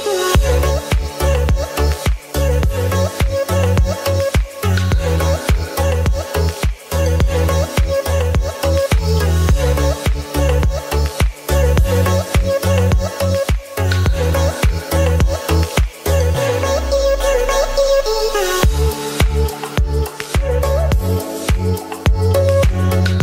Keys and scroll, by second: 3.4 ctrl+s, 7.8 space, 8.4 ctrl+z, 10.6 [, 13.2 space, 14.2 ctrl+z, 14.5 [, 16.1 ], 16.8 space, 22.1 space, 22.7 ctrl+z, 22.8 [.